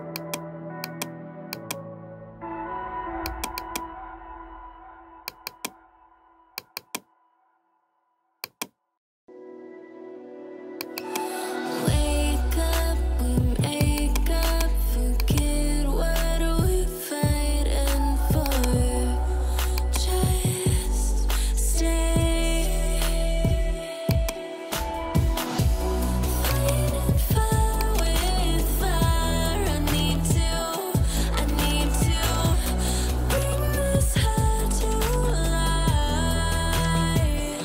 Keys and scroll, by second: 9.6 ctrl+j, 12.1-13.3 typing, 16.2-17.7 typing.